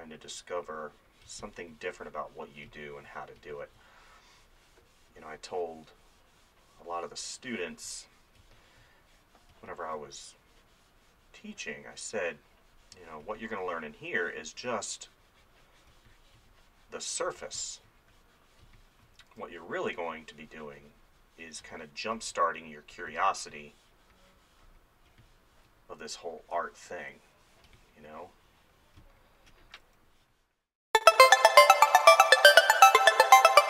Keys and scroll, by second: 1.3 space, 8.4 space, 13.3 space, 16.0 space, 19.2 [, 21.6 space, 26.0 [, 27.7 space, 29.8 [.